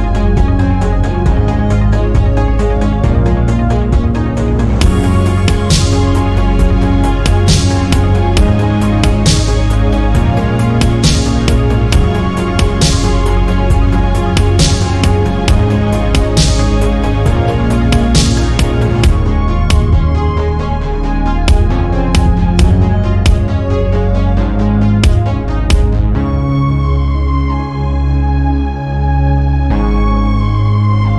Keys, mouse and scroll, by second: 0.2 click, 0.6 shift+click, 1.0 shift+click, 2.4-3.0 drag, 3.0 middle click, 3.8 KP_Decimal, 4.2 scroll down 2, 4.3 middle click, 5.2 click, 7.5 click, 8.0 Tab, 8.2-8.8 middle drag, 8.8 Tab, 9.0 middle click, 9.7 ctrl+r, 11.0 middle click, 11.9 ctrl+r, 13.4 Tab, 13.7 scroll down 1, 14.0-15.0 middle drag, 15.0 Tab, 15.2-16.7 middle drag, 16.7 1, 16.9 click, 17.6 g, 19.2 middle click, 20.2 click, 20.8 click, 21.4 g, 22.7-23.7 middle drag, 23.7 2, 24.1 click, 24.5 shift+click, 24.9 shift+click, 25.6 click, 29.0 Tab, 29.3-30.6 middle drag, 30.6 Tab.